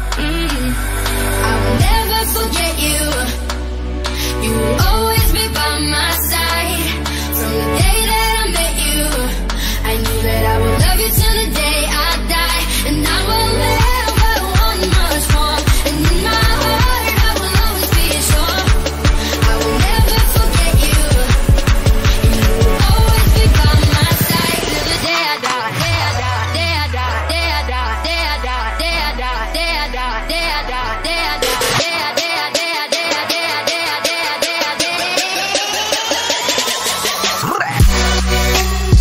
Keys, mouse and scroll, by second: 1.5 click, 2.5 right click, 4.6 click, 6.5 right click, 7.7 click, 13.8 shift+F5, 15.1 click, 18.0-20.4 drag, 20.4 ctrl+d, 23.0 ctrl+t, 24.1 right click, 26.6-33.6 drag, 34.7 click, 35.8-36.4 typing, 38.6 click.